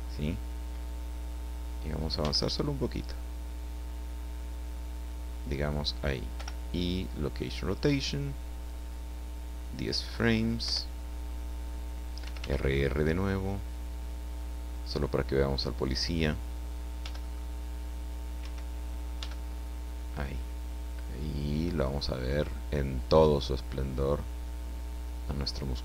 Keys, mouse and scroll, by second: 2.2 g, 2.4 click, 5.7 click, 6.4 i, 6.9 click, 8.6-10.0 drag, 10.6 Left, 12.2 r, 15.9 click, 17.0 g, 18.4 Escape, 19.2 g, 19.5 middle click.